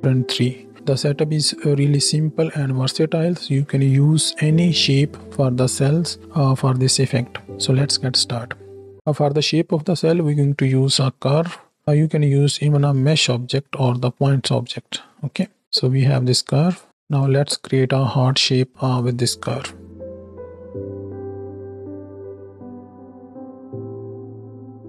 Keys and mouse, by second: 0.0 space, 0.7 click, 1.0 middle click, 2.8 space, 3.2 click, 3.3 middle click, 3.6 middle click, 5.2 middle click, 5.5 middle click, 5.9 middle click, 6.1 middle click, 6.5 middle click, 6.8 right click, 7.5 middle click, 11.8 shift+a, 15.6 ctrl+shift+space, 15.6-16.0 shift+middle drag, 16.5 shift+middle click, 16.8 Tab, 19.5 shift+middle click, 20.0 g, 20.5 shift+click, 20.7 v, 21.1 click, 22.1 click, 22.1 g, 22.3 click, 22.5 right click, 22.9 click, 23.6 g, 23.9 click, 24.3 g.